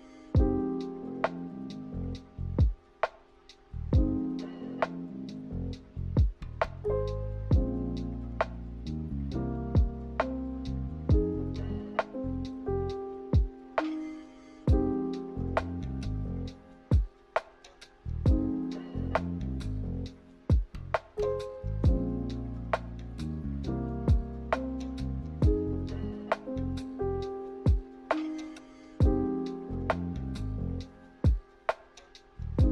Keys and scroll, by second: 7.6 ctrl+h, 8.2 ctrl+h, 21.9 ctrl+h, 22.4 ctrl+h, 22.9 ctrl+h.